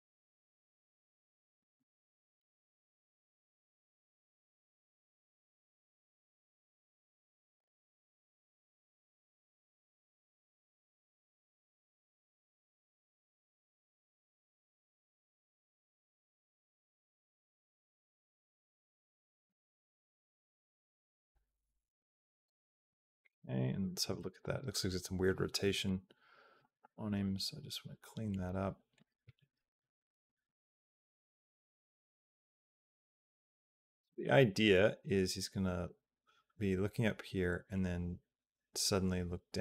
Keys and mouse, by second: 2.3 a, 2.6 g, 5.8-7.2 drag, 8.0 g, 9.6-13.0 drag, 13.0 space, 16.0 space, 16.4 click, 17.2 space, 19.3 space, 19.7-22.3 drag, 22.7 a, 23.9 Down, 24.3 Up, 25.5 click, 26.4 r, 30.3 Down, 30.7 Up, 31.0 Up, 31.7 Up, 32.5 Up, 32.9 Up, 33.1 Down, 33.3 Down, 33.4 Down, 33.6 Down, 33.8 Down, 34.6-39.6 drag.